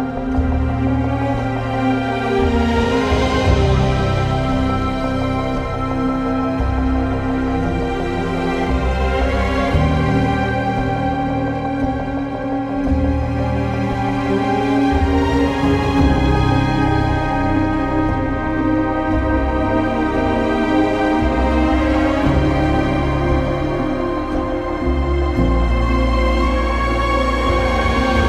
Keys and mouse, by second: 2.9 click, 4.2 ctrl+z, 4.4 ctrl+x, 5.6 ctrl+z, 8.1 ctrl+r, 9.0 click, 9.5 1, 10.0 click, 10.5 shift+click, 11.4 j, 11.8 2, 12.4 alt+click, 12.8 ctrl+x, 14.4 ctrl+r, 15.1 click, 15.2 right click, 16.1 1, 17.7 shift+click, 18.6 j, 19.1 2, 19.5 alt+click, 20.1 ctrl+x, 20.8 1, 21.0 click, 23.2 alt+z, 27.5 g, 27.9 z.